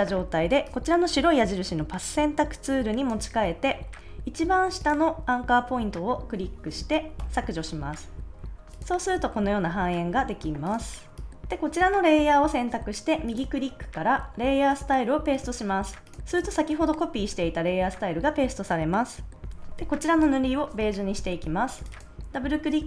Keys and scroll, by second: 7.1 BackSpace.